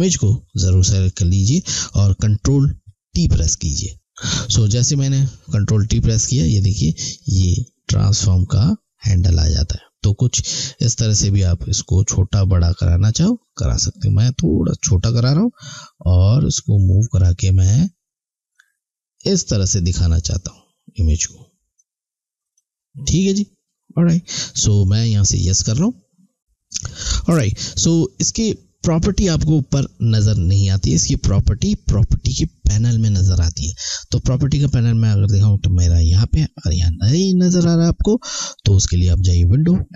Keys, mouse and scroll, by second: 7.6 click, 15.7 click, 25.3 click, 35.4 click, 38.7 click.